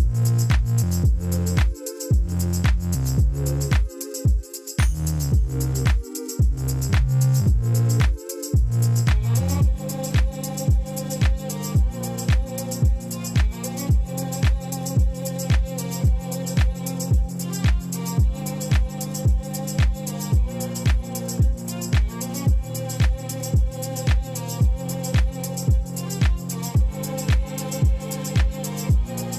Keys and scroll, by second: 0.1 Escape, 0.5 ctrl+b, 5.3 Tab, 9.0 Tab, 12.4 Tab, 26.7 Tab.